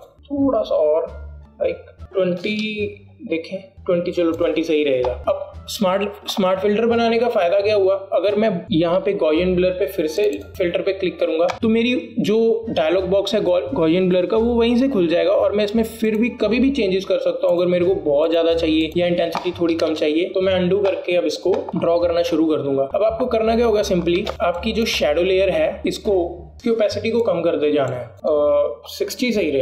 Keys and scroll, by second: 3.7 KP_0, 20.4 KP_2, 20.6 KP_0, 21.0 Return, 25.2 alt+space.